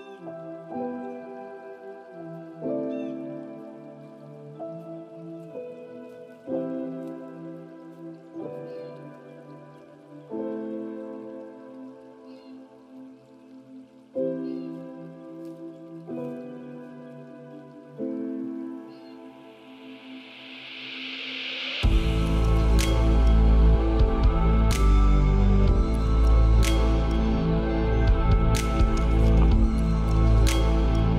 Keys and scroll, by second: 21.1 ctrl+g, 22.4 ctrl+space, 28.1 ctrl+space.